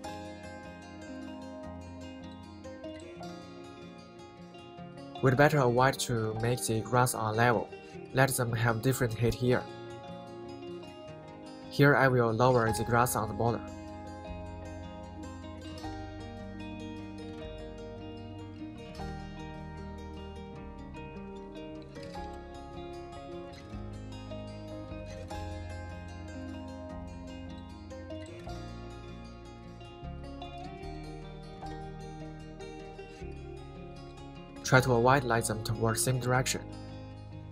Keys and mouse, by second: 0.0 middle click, 1.2 r, 1.3 y, 2.1 drag, 2.3-5.2 middle drag, 5.3 KP_1, 6.0 shift+click, 11.5 s, 12.3 click, 13.0 s, 13.4-13.9 drag, 14.3 middle click, 15.1 z, 15.9 click, 16.2 s, 16.6 click, 17.1 s, 17.6 click, 18.1 s, 18.5-19.3 drag, 19.4 s, 20.1 middle drag, 20.9-21.4 middle drag, 21.8 KP_1, 22.3 r, 22.4 z, 23.6 click, 23.9-24.4 middle drag, 24.6 r, 24.7 y, 25.4 right drag, 25.7 middle click, 25.9 KP_1, 26.5 right drag, 26.7 middle click, 27.3 KP_1, 27.8 middle click, 28.7 r, 28.9 z, 29.6 click, 30.2 click, 30.5 r, 30.6 z, 31.4 drag, 31.6-32.4 middle drag, 32.7-33.1 middle drag, 33.3 middle click, 33.5 KP_1, 34.1 middle click, 34.9 middle click, 36.0 s, 36.7 right click, 36.9 middle click, 37.4 s.